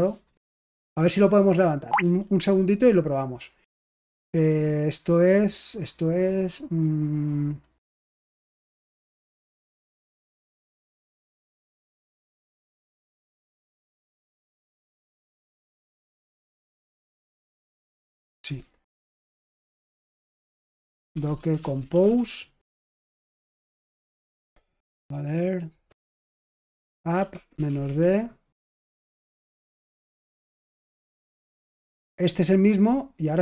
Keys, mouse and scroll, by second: 0.2-1.9 BackSpace, 7.7-9.6 typing, 11.1 ctrl+l, 11.9 ctrl+l, 13.4-18.8 typing, 15.0 Return, 20.4-22.5 typing, 23.7 Return, 26.1 ctrl+p, 26.5-28.9 typing.